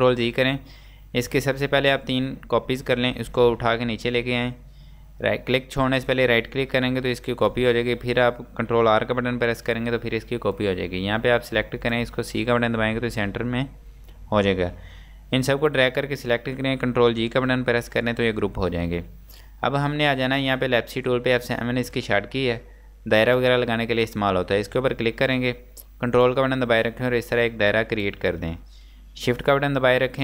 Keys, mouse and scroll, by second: 0.1 ctrl+z, 1.3 click, 7.3 ctrl+right click, 9.2 r, 10.6 click, 12.5 c, 15.7 click, 17.5 ctrl+g, 23.2 g, 23.3 click, 25.9 ctrl+Num_Lock, 26.3 ctrl+click.